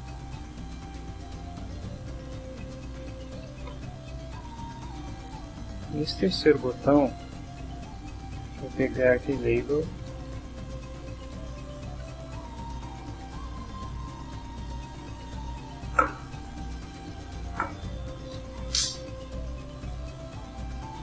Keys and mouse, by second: 2.0 click, 2.6-4.0 typing, 5.3 click, 5.9 click, 6.8-7.8 drag, 8.1-12.1 typing, 12.9 Down, 13.2 Return, 14.4 Down, 14.9 Return, 18.5 shift+0, 20.5-21.0 typing.